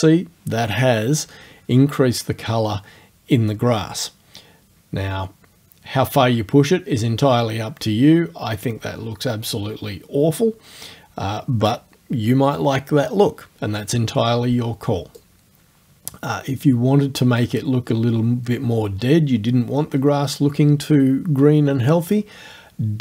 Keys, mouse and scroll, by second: 15.2-21.8 drag, 22.4-23.0 drag.